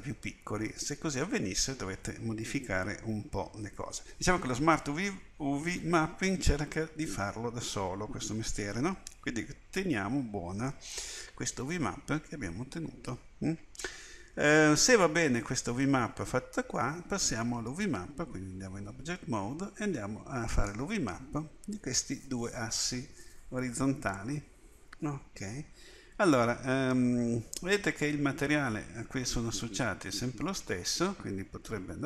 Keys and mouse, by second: 18.9 Tab, 20.5 click.